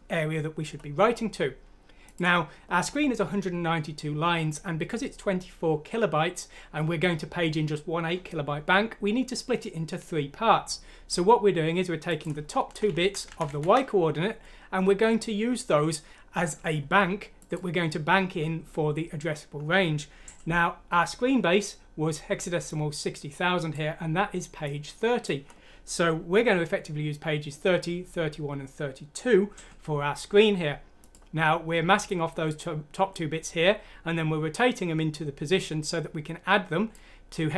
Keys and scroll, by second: 12.9 Left, 13.2 Left, 13.4 Left.